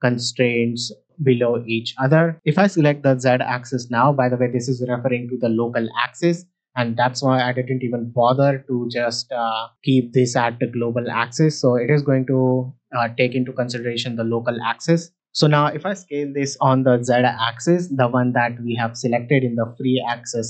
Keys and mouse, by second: 3.5 middle drag, 9.7-10.5 drag, 11.1 middle drag, 15.2 middle click, 16.5 s, 16.7 z.